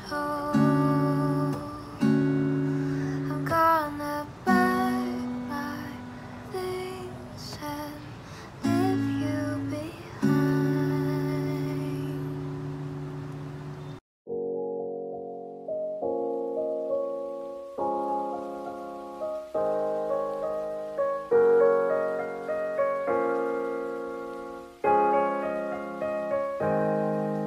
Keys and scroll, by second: 7.2 space, 14.3-17.4 typing, 19.8 ctrl+space, 20.4-21.4 typing, 21.7 Return, 24.9 ctrl+space, 26.5 c.